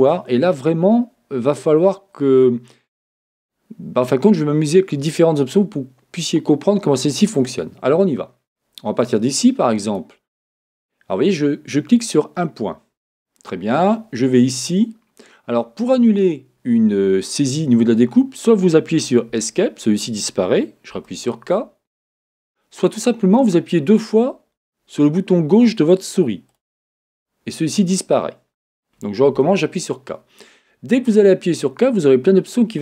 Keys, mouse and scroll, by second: 19.4 Escape, 20.9 Escape, 26.7 click, 29.3-32.8 middle drag, 29.3 k.